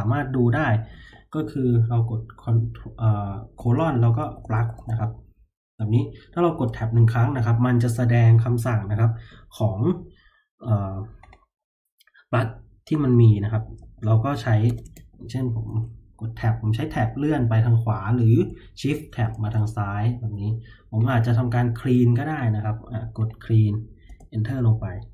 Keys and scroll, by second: 3.5-5.3 typing, 6.6 Tab, 13.6 l, 13.9 l, 14.6 BackSpace, 14.8 BackSpace, 15.6 Tab, 16.6-18.7 Tab, 18.8 shift+Tab, 19.1 shift+Tab, 24.0 Return.